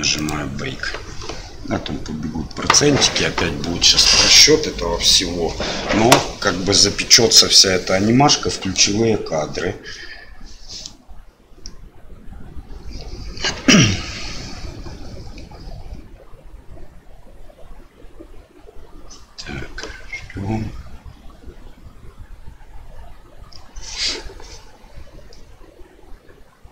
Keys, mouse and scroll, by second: 0.1-26.7 drag.